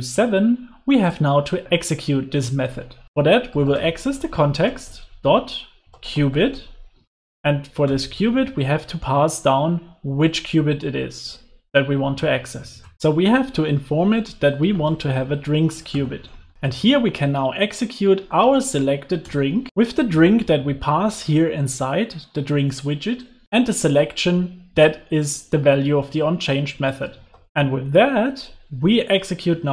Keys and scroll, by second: 6.5 Return, 16.2 Return, 27.5 super+s.